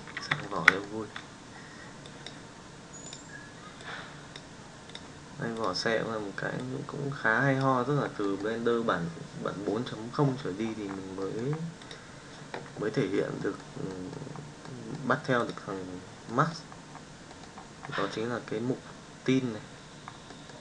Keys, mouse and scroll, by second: 0.5-0.9 shift+middle drag, 13.5 middle drag, 13.9 middle drag, 14.6-14.9 middle drag, 15.4 click, 16.2-16.6 middle drag, 20.3 middle click.